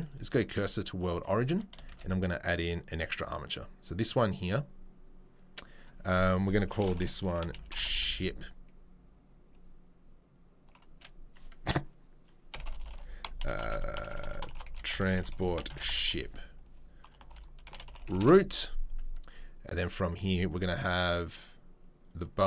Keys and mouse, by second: 1.5 Tab, 1.9 shift+a, 2.7 click, 3.5-5.7 middle drag, 5.7-7.4 drag, 7.4 shift+right click, 7.8-13.3 drag, 12.6 BackSpace, 12.8 BackSpace, 13.3 shift+right click, 13.5 click, 14.4 shift+right click, 14.6-15.6 drag, 15.6 shift+right click, 15.8-17.2 drag, 17.2 shift+right click, 17.8-19.8 drag, 19.8-22.0 middle drag, 22.0 click, 22.1 middle click.